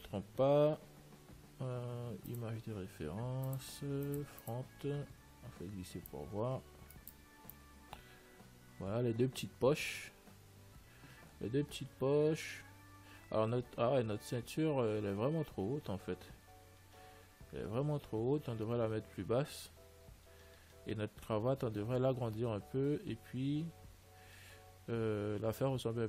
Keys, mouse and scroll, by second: 1.3 n, 2.6-6.3 drag.